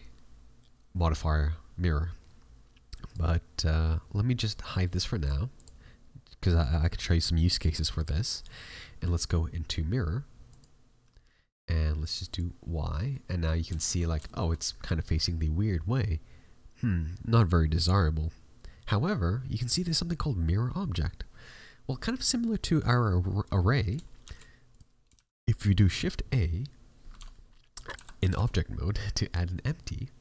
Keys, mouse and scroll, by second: 3.0-7.9 click, 8.3 click, 12.0 click, 13.0 middle click, 13.7 shift+middle click, 14.0 scroll up 2, 14.2 shift+middle click, 24.2 shift+s, 25.1 shift+a, 27.1 Tab, 27.9 a, 28.4 shift+a.